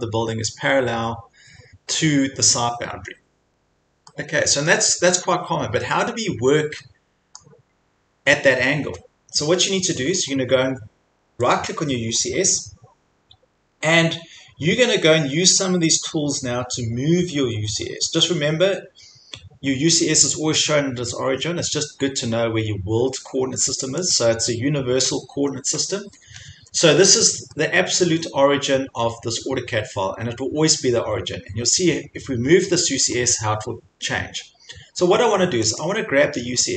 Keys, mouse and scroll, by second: 3.6 scroll, 4.7 scroll, 7.4 middle click, 10.6-11.6 scroll, 11.6 right click, 24.1 click, 26.3 Escape, 26.6 Escape, 26.8 4, 27.6 5, 32.6 scroll, 33.2 scroll, 33.8 scroll, 35.8 click.